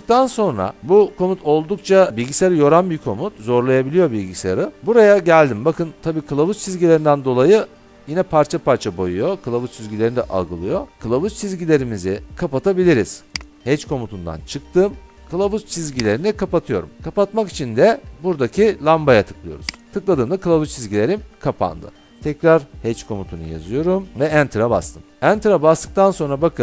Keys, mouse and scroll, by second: 13.5 click, 16.0 click, 19.8 click, 22.1-23.1 scroll, 23.1-24.1 typing, 24.5 Return.